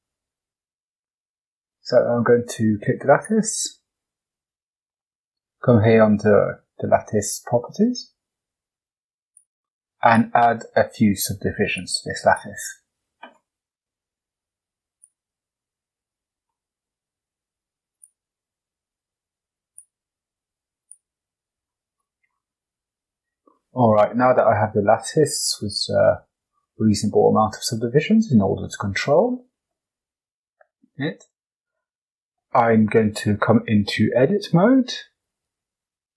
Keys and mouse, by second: 3.0 click, 9.2 click, 9.9 click, 11.1 click, 11.8 click, 15.0 click, 16.5-16.8 middle drag, 17.9 click, 20.8 click, 21.9-22.2 middle drag, 22.7 Tab, 23.4 shift+middle click, 28.9 click, 30.4 click, 31.1 shift+click, 33.8 Tab, 35.3-36.1 drag.